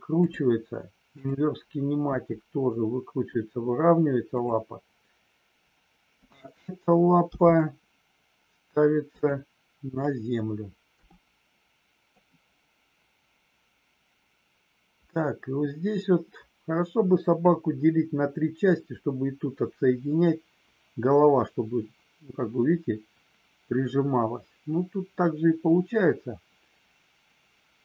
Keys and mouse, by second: 1.1 click, 1.9 r, 4.3 click, 7.3 g, 9.1 click, 10.9 r.